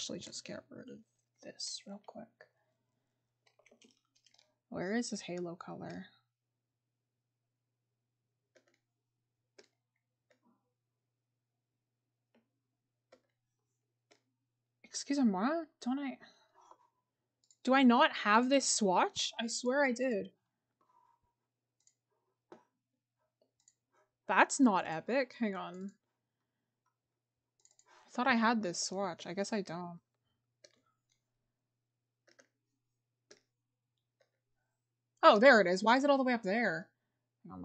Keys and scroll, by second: 3.6 scroll up 1, 29.0-29.6 scroll, 29.8-30.1 scroll up 1.